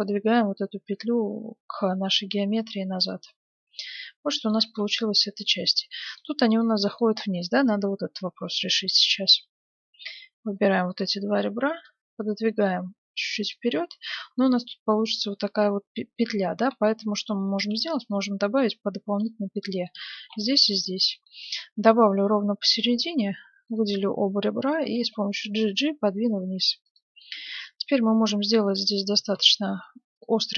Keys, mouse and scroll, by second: 0.0-1.7 drag, 2.8-5.4 middle drag, 4.6 Tab, 7.4 Tab, 8.4-10.7 middle drag, 8.4-10.2 right drag, 10.5-12.2 right drag, 10.9-12.5 middle drag, 11.8-13.5 drag, 13.5-15.3 middle drag, 15.6-18.8 middle drag, 16.3 ctrl+z, 17.6 ctrl+r, 19.7-23.0 middle drag, 20.2 ctrl+r, 23.7-25.4 right drag, 24.8 g, 27.2-28.9 middle drag, 29.2 g.